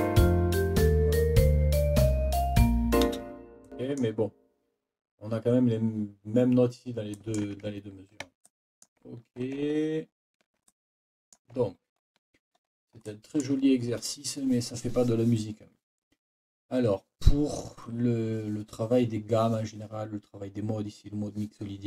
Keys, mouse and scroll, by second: 3.0 space, 3.8 click, 7.1 click, 7.8 ctrl+scroll down 2, 8.4 ctrl+click, 10.1 ctrl+scroll down 2, 11.0 scroll up 2, 11.9 ctrl+scroll up 2, 12.6-13.6 ctrl+scroll up 4.